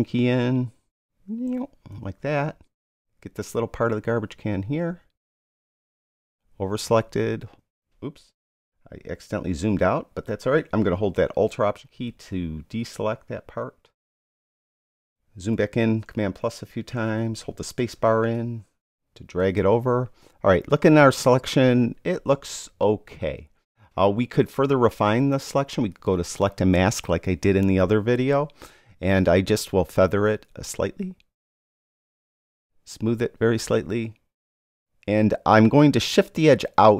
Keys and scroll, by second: 16.0 super+=, 17.8 super+space.